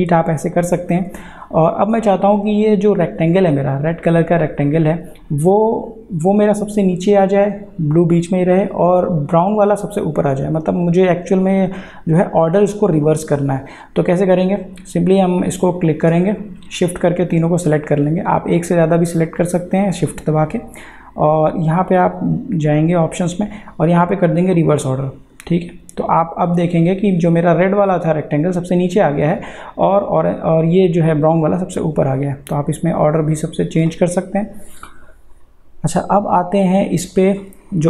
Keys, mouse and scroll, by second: 14.3 click, 22.0 click, 24.6 click, 32.1 click.